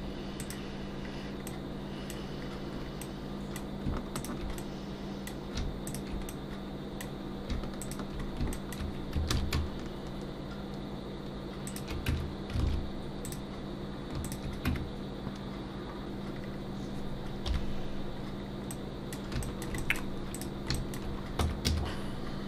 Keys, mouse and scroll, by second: 0.4 click, 1.1-1.5 scroll down 2, 1.5 middle click, 2.4-2.8 scroll down 1, 3.0 middle click, 4.1 shift+click, 4.6 middle click, 5.8 shift+click, 6.3 middle click, 7.8 shift+click, 8.2 scroll up 2, 8.5 shift+middle click, 9.3 ctrl+b, 12.1 Tab, 12.6 alt+a, 13.2 click, 14.2 shift+click, 14.7 Tab, 16.4 scroll down 2, 17.0-17.5 scroll down 1, 17.5 /, 18.4 scroll down 1, 18.7 middle click, 19.4 shift+middle click, 19.8 middle click, 20.3 click, 20.7 shift+middle click, 21.4 Tab, 21.7 a.